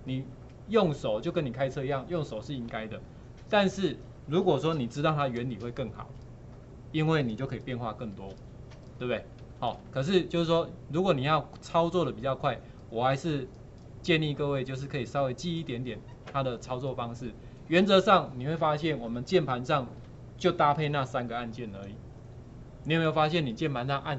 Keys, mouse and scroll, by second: 10.5-16.7 alt+drag.